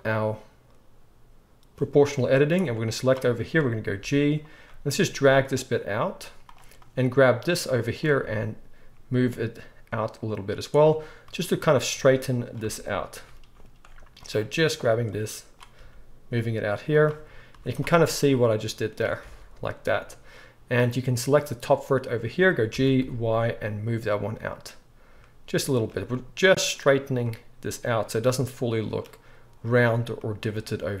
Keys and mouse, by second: 2.6-6.5 drag, 4.0 g, 6.5 middle click, 6.9-10.8 drag, 8.2 g, 10.8 middle click, 11.2-14.3 drag, 12.6 g, 14.3 middle click, 14.7 click, 15.1-17.0 drag, 15.8 g, 17.0-21.3 middle drag, 17.5 z, 19.2 alt+a, 21.3 click, 21.4-31.0 middle drag, 22.7 g.